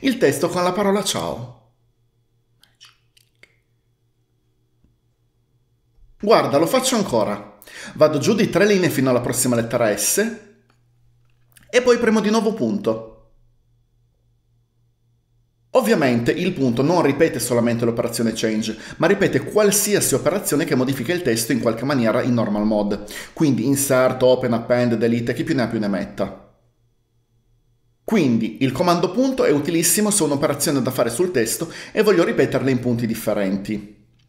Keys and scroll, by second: 8.4-9.7 typing, 12.8 typing.